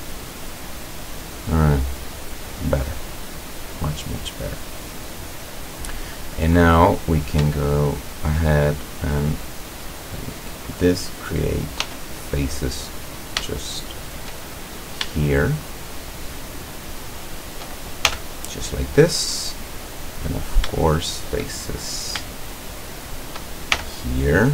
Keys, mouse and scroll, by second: 0.5-0.9 middle drag, 1.2 scroll down 1, 1.5-3.5 middle drag, 3.5 scroll down 1, 4.0 middle click, 4.9 middle click, 5.2-5.7 scroll up 1, 6.5 right click, 7.9 shift+right click, 9.6 click, 11.9 f, 13.6-14.3 shift+middle drag, 14.8 shift+right click, 15.5 shift+right click, 16.3 shift+right click, 17.3 shift+right click, 18.1 shift+f, 18.6-19.9 middle drag, 20.4 shift+right click, 21.0 shift+right click, 22.6 shift+right click, 23.0 shift+right click, 23.8 shift+f.